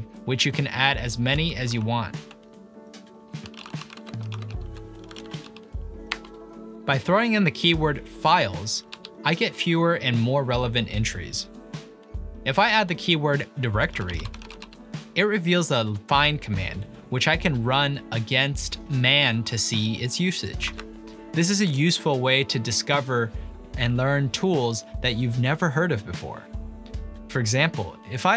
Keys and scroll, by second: 1.4 ctrl+p, 2.3 Up, 3.2-5.9 typing, 6.1 Return, 8.9 ctrl+p, 12.8-16.4 typing, 20.1 typing.